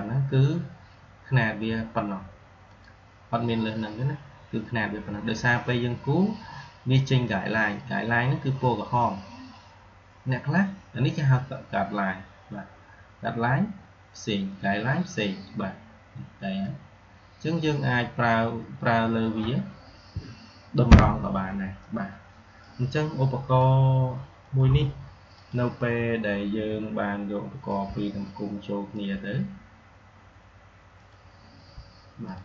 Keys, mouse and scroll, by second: 2.6 click, 11.0-13.5 drag, 16.5-18.4 drag, 20.0 Delete, 22.5-23.7 drag, 27.6-32.4 drag.